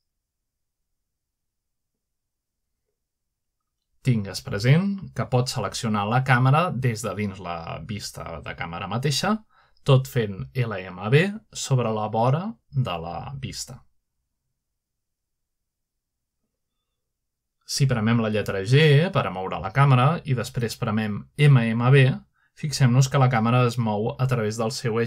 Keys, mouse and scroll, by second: 0.7 x, 2.5-3.1 typing, 4.7 typing, 7.2 typing, 9.6-10.4 right drag, 10.3 click, 12.6 click, 14.4 click, 14.7 g, 15.5 right click, 16.3 click, 16.9 typing, 19.1 right click, 19.4-22.1 middle drag, 19.9 g, 22.7-23.8 middle drag, 24.6 middle click.